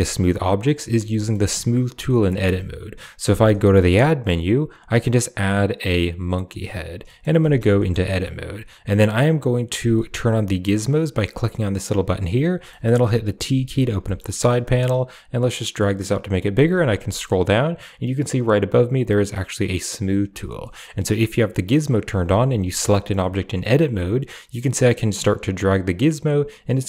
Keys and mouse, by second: 1.0 shift+middle click, 3.4 shift+a, 6.9 middle click, 7.3 Tab, 7.6 shift+middle click, 8.7 click, 11.0 click, 11.8 click, 12.0 click, 12.6 middle click, 13.4 t, 13.9 shift+middle click, 15.3 click, 19.9 click, 20.5 middle click, 21.4 click, 21.7 click, 22.1 a, 22.3 a, 22.7 middle click, 24.4 click, 24.6-26.8 drag.